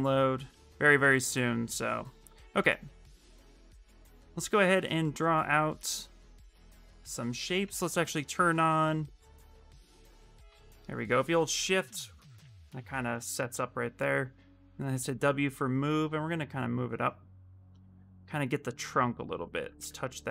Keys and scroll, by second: 0.2 s, 7.4 x, 14.4 w, 19.5 e.